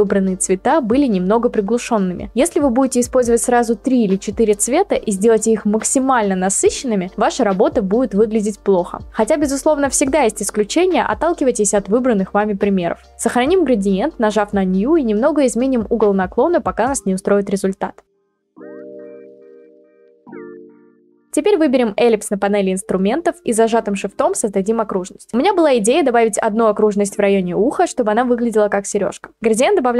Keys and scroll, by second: 15.9-18.5 typing.